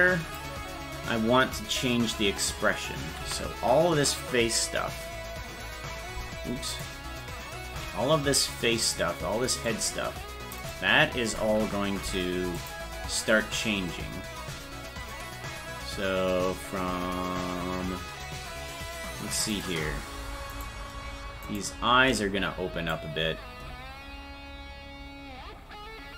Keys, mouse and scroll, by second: 7.1 right click, 7.7 c, 19.8 right click, 19.8-20.8 scroll up 1, 21.6 right click, 22.0 shift+right click, 22.9-26.1 drag.